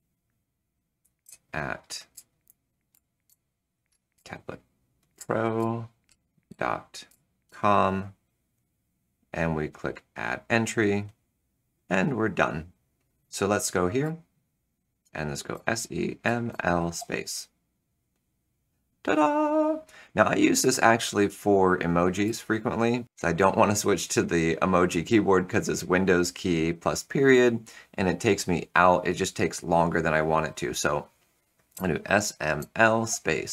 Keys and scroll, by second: 0.9-7.9 typing, 13.9 Return, 15.2-16.9 typing, 22.2 Return, 31.6 shift+s, 32.5 l, 33.0 space.